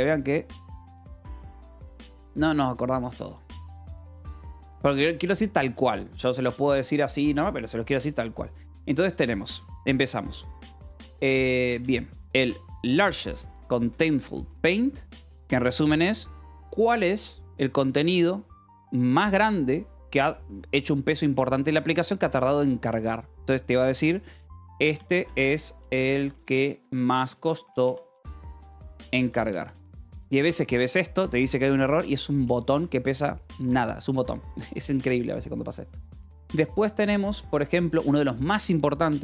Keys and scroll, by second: 12.1 alt+Tab, 13.3-15.8 typing, 24.7-29.9 typing, 31.1-32.7 typing.